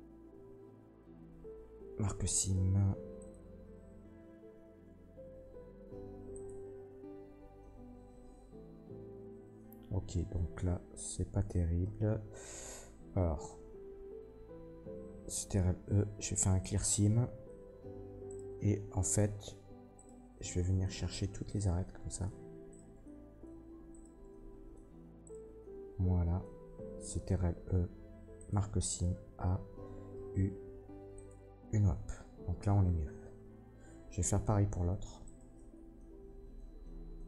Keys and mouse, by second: 4.4 a, 5.8-7.5 drag, 5.8 u, 9.9 ctrl+z, 10.3 ctrl+z, 10.6 ctrl+z, 11.8 a, 12.6-24.7 drag, 15.4 ctrl+e, 18.2 middle click, 18.2 right click, 19.9 shift+middle click, 19.9 shift+right click, 21.4 shift+middle click, 21.4 shift+right click, 22.6 shift+middle click, 22.6 shift+right click, 23.8 shift+middle click, 23.8 shift+right click, 25.2 shift+middle click, 27.2 ctrl+e, 28.9 a, 30.1 u, 33.1-37.2 drag, 34.8 Tab, 35.2 middle click, 35.2 right click, 35.5 Tab.